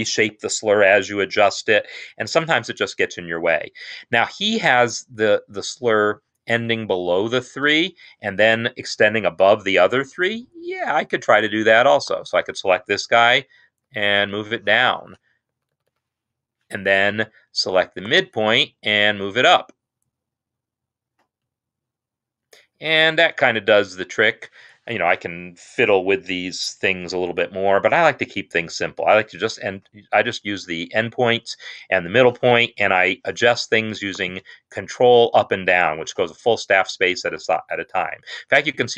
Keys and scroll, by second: 13.2 ctrl+Down, 13.7 ctrl+Down, 15.6 Down, 15.8 Down, 16.0 Down, 19.0 ctrl+Up, 21.2 ctrl+Up, 34.9 ctrl+Up, 35.8 ctrl+Down, 38.2 ctrl+Up.